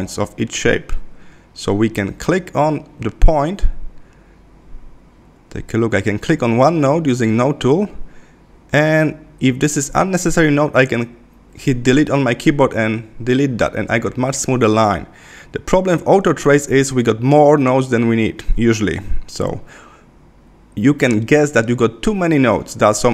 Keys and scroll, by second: 2.7 super+=, 9.3 Left, 17.0 BackSpace.